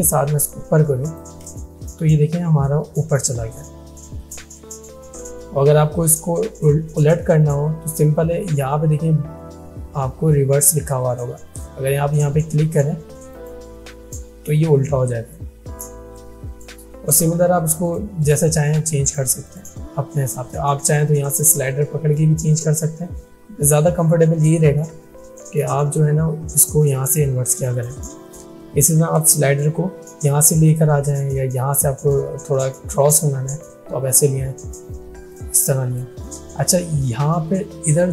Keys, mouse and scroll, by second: 3.3-17.9 drag, 25.4 click, 29.6-30.9 shift+drag, 35.4-36.3 shift+drag.